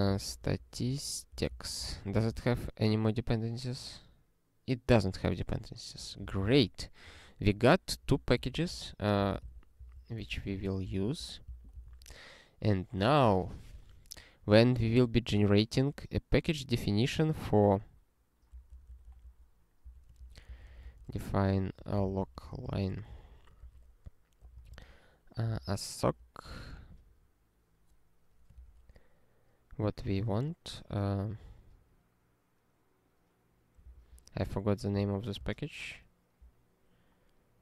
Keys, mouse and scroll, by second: 0.0-2.0 typing, 2.1 ctrl+b, 2.4 ctrl+e, 5.3 ctrl+e, 6.3 ctrl+e, 7.4 ctrl+n, 7.9 ctrl+p, 8.1 ctrl+p, 8.4 ctrl+space, 8.5 ctrl+a, 8.7 ctrl+w, 9.2 ctrl+k, 9.5 ctrl+s, 9.8 ctrl+n, 10.0 ctrl+n, 10.5 alt+^, 11.0 ctrl+s, 11.2 ctrl+e, 11.5 Return, 11.8 ctrl+s, 14.8 ctrl+n, 15.0 ctrl+n, 15.3 ctrl+n, 17.3 ctrl+n, 17.5 ctrl+n, 18.5 ctrl+p, 18.7 ctrl+p, 18.9 ctrl+p, 19.0 ctrl+p, 19.2 ctrl+p, 19.8 Return, 19.9-26.2 typing, 28.5 ".